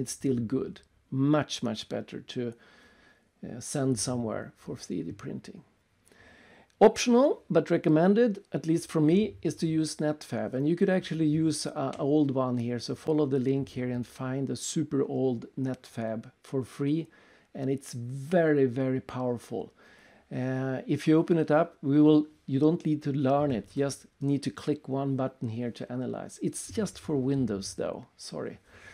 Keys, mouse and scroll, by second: 0.8 click, 2.0 click, 3.2 alt+Tab, 4.0 alt+Tab, 4.8-5.5 scroll down 3, 7.1 click, 9.2-9.6 scroll down 3, 12.5 click, 16.6 click, 17.4 click, 17.6 click, 18.9 click, 23.1 click, 24.9 alt+Tab, 26.6 click, 27.8 click.